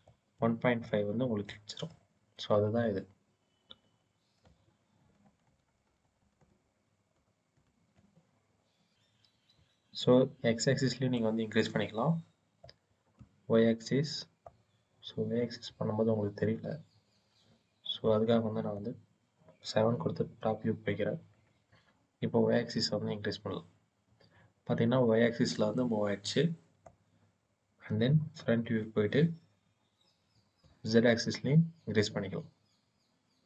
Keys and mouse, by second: 0.2 click, 1.3 click, 4.8 ctrl+z, 5.1 ctrl+z, 6.5 ctrl+z, 6.9 ctrl+z, 7.4 ctrl+z, 11.0-12.5 drag, 13.0-14.3 drag, 15.6 click, 17.9 click, 20.0 KP_7, 22.6-26.7 drag, 28.3 KP_1, 30.5-33.4 middle drag.